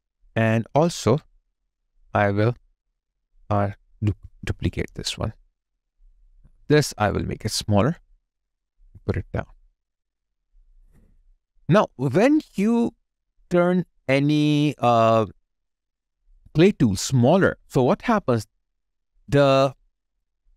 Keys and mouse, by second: 7.0 d, 10.3 alt+right click, 10.7 alt+middle click, 11.2 alt+click, 12.8 alt+right click, 13.2 alt+middle click, 14.7 alt+click.